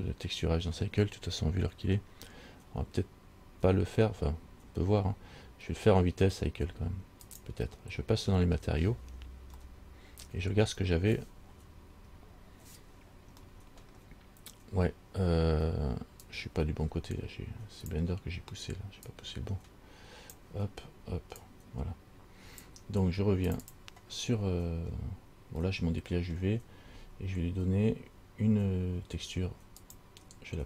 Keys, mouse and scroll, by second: 16.8 shift+middle click, 25.1-25.7 scroll down 1, 25.9 middle click, 26.5-27.7 scroll down 1, 30.1 click.